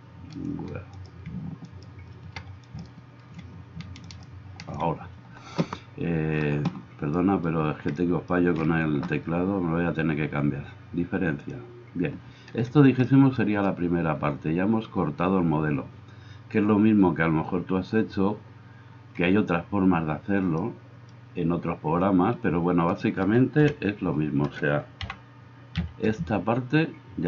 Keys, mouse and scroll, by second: 0.9 middle click, 0.9 right click, 1.7 middle click, 1.7 right click, 2.7-3.8 shift+middle drag, 2.7-4.3 shift+right drag, 22.9 middle click, 22.9 right click, 23.6 KP_1, 25.0 g.